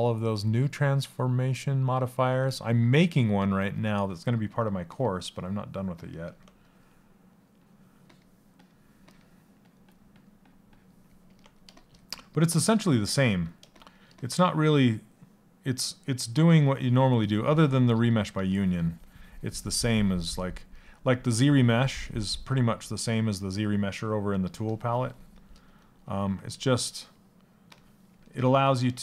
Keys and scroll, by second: 4.3 BackSpace.